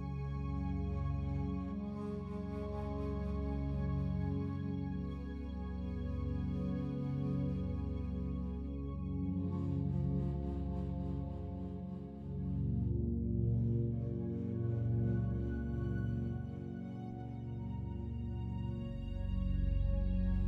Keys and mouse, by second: 0.4 g, 0.7 z, 3.8 shift+click, 5.1 i, 5.7 click, 6.5 click, 7.6 click, 8.7-10.5 drag, 11.0 g, 11.3 z, 15.2 Escape, 16.4 click, 17.6 click, 18.6 g, 18.9 z.